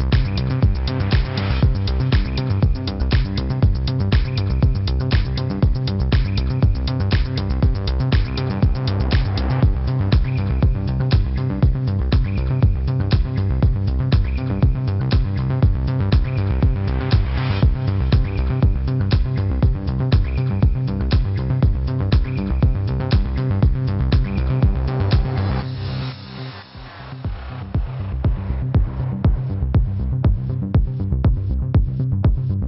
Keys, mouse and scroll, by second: 1.1 F9, 3.3 F9, 4.5 click, 7.3 ctrl+shift+v, 9.0 g, 9.4 click, 18.5 click, 19.0 click, 19.7 alt+shift+click, 20.1 click, 20.3 ctrl+=, 20.7 click, 21.9 F9, 28.7 F9, 29.7 click, 29.9 -, 30.5 click, 31.8 click, 31.9 space, 32.4 click, 32.5 space.